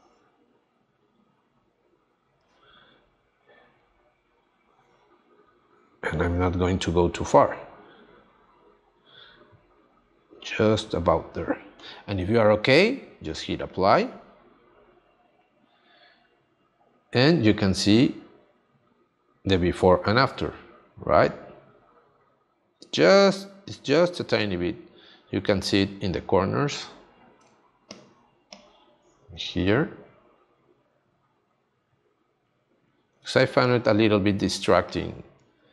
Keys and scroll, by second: 27.3 space, 33.2 space.